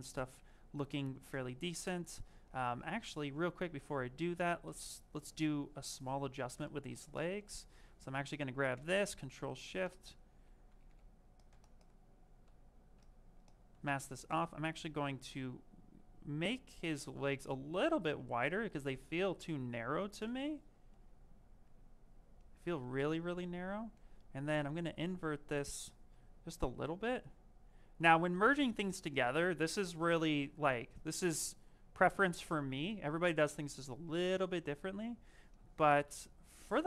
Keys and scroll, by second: 8.6 ctrl+shift+a, 10.5 ctrl+z, 10.7 ctrl+z, 12.3 ctrl+z, 36.0 s.